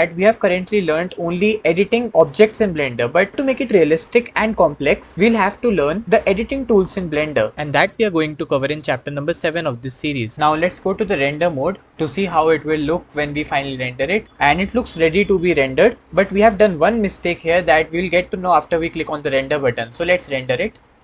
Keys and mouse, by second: 20.0-21.0 drag.